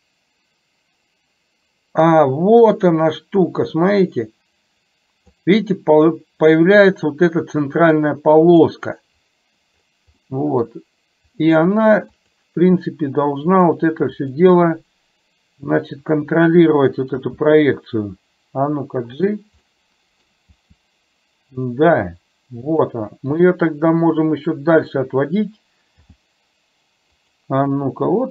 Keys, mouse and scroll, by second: 10.4-10.8 middle drag, 11.3 click, 12.4 click, 13.8 click, 14.3 click, 17.4 g, 19.8 middle click, 20.5 g, 23.5-24.9 middle drag, 26.0 g, 28.0-28.3 middle drag.